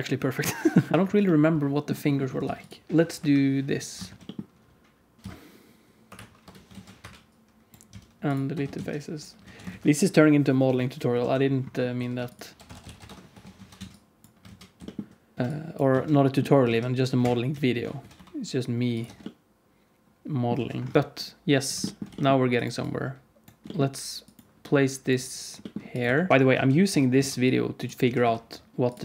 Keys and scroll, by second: 0.9 ctrl+s, 0.9 alt+shift+z, 2.4 ctrl+s, 3.1 KP_7, 4.0 shift+d, 5.2 Tab, 5.2 alt+z, 5.2 r, 6.6 alt+z, 6.9 2, 7.3 3, 7.8 x, 8.4 Tab, 8.7 alt+z, 9.3 alt+a, 9.7 ctrl+s, 10.6 Tab, 11.1 alt+z, 11.9 2, 13.0 F3, 13.2 Tab, 13.5 alt+z, 13.7 alt+a, 13.9 alt+z, 13.9 ctrl+s, 13.9 Tab, 14.4 alt+z, 14.7 g, 15.3 alt+z, 15.9 alt+z, 16.5 s, 17.4 q, 18.0 s, 19.0 Tab, 20.5 alt+z, 20.9 Tab, 20.9 KP_7, 22.0 g, 23.5 g, 25.5 g, 26.0 1, 26.3 Tab, 26.5 alt+z, 26.8 Tab, 27.1 alt+z, 27.9 s.